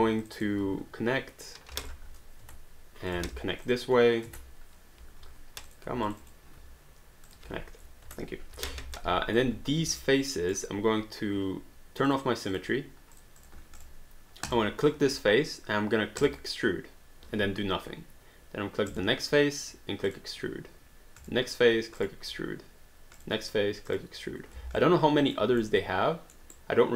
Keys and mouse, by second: 0.2 shift+click, 1.8 click, 2.5 Return, 3.1 click, 3.7 shift+click, 4.3 Return, 5.7 click, 6.1 shift+click, 7.3 click, 8.1 Return, 9.0 alt+click, 9.8 q, 10.0 right click, 12.1 click, 16.2 click, 18.9 click, 20.1 click, 21.2 click, 23.2 click, 24.8 alt+click, 26.3 alt+middle click, 26.5 alt+right click.